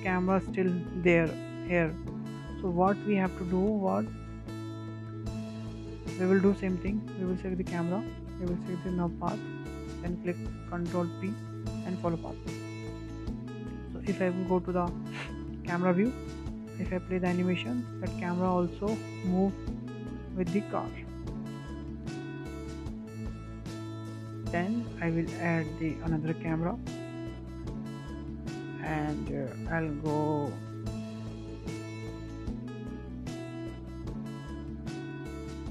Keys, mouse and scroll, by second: 0.4 space, 1.5-4.0 drag, 4.0 KP_0, 4.2-4.8 scroll down 5, 4.8-5.2 middle drag, 5.2 scroll up 4, 5.5 shift+middle click, 5.8 scroll down 1, 6.0 shift+middle drag, 6.3-6.6 scroll up 3, 6.6-7.0 shift+middle drag, 7.0 scroll down 1, 7.3-8.2 shift+middle drag, 8.2 click, 9.7 ctrl+click, 11.9 ctrl+p, 13.9-14.5 scroll down 4, 14.7 KP_0, 15.4 click, 15.9 KP_0, 18.0 space, 22.3 space, 23.5-25.3 drag, 25.3 KP_0, 25.6-26.1 scroll down 3, 26.1 middle drag, 26.4-27.4 scroll up 7, 26.6-27.0 shift+middle drag, 27.4-27.9 shift+middle drag, 27.9 shift+a, 29.0-29.4 scroll down 5, 29.4-29.8 shift+middle drag, 29.8-30.2 scroll up 5, 30.2-30.6 middle drag, 30.6-31.0 scroll up 5, 31.0-31.3 shift+middle drag, 31.3-31.7 scroll down 2, 31.7-32.0 scroll up 2, 32.0-32.4 scroll down 2, 32.4-32.7 shift+middle drag, 32.7 scroll down 2, 33.8 click, 35.0-35.7 middle drag.